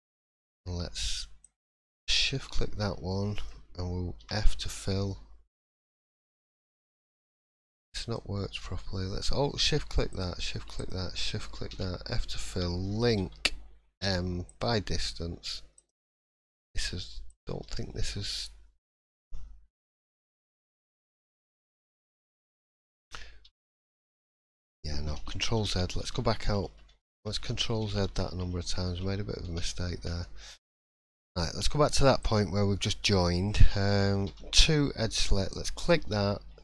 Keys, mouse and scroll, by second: 1.4 shift+click, 2.3 scroll down 3, 2.6-3.1 scroll up 2, 3.1 shift+middle click, 4.2 f, 5.9 shift+middle click, 8.0 alt+click, 10.1 shift+click, 11.0 shift+click, 11.7 f, 13.1 l, 15.8 click, 15.8 m, 16.2 scroll down 2, 16.4 middle click, 16.7 scroll up 2, 17.2 click, 17.6 middle click, 20.2-20.8 scroll up 3, 21.2-21.7 scroll down 5, 21.6-22.5 scroll up 2, 22.5 click, 23.4 3, 23.6 click, 24.3 scroll down 2, 25.3 ctrl+z, 25.6 ctrl+z, 25.8-26.4 ctrl+z, 26.6 ctrl+z, 27.5 ctrl+z, 28.3 ctrl+z, 30.0 ctrl+z, 30.8 ctrl+shift+z, 31.3-32.2 scroll up 2, 32.2 click, 33.0 shift+middle click, 34.3 2, 35.5 click.